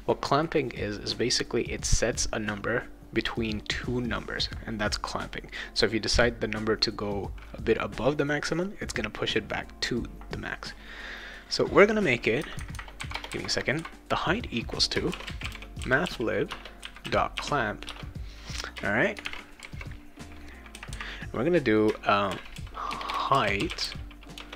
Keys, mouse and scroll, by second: 13.1 BackSpace, 14.8-17.3 typing, 17.8 Return, 19.1 shift+9, 22.3-24.5 typing, 24.4 Return.